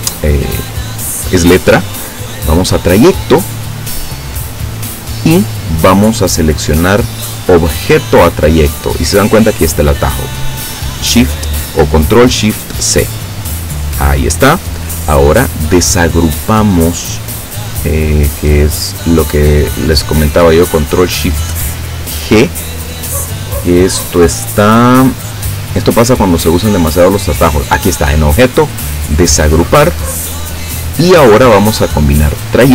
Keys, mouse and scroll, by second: 3.0 click, 13.4 click, 15.4 click, 29.8 click, 32.4 click.